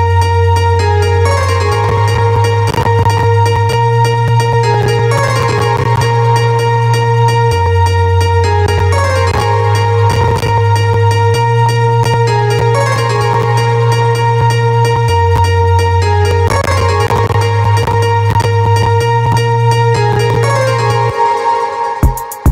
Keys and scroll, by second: 21.1 space.